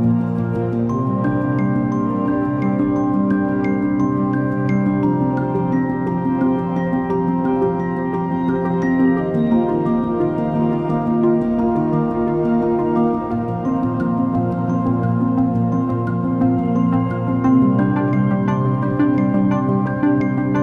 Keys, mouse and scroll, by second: 4.6 space, 15.0 Delete.